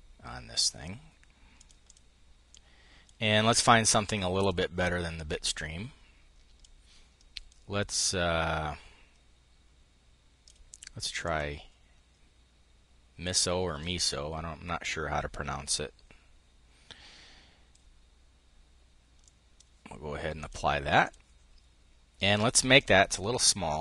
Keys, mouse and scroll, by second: 1.2 click, 3.9 click, 6.2-10.9 drag, 18.8 click, 19.0-20.5 drag, 20.6 click.